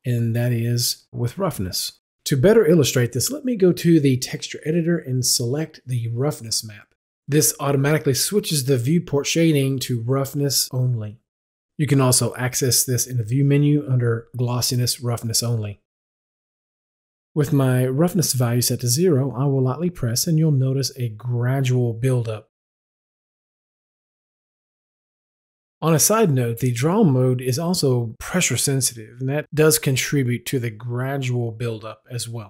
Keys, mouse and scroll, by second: 4.8 click, 7.1 click, 10.4 Delete, 11.9 click, 21.5 right click, 23.2-28.2 drag.